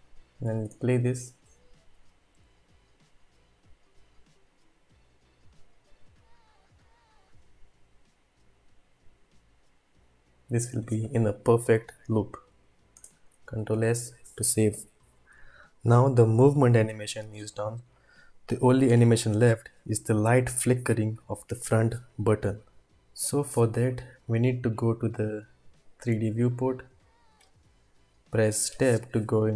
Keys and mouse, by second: 0.6 space, 12.9 space, 13.7 ctrl+s, 23.1-24.9 drag, 28.7 Tab, 28.8 Tab.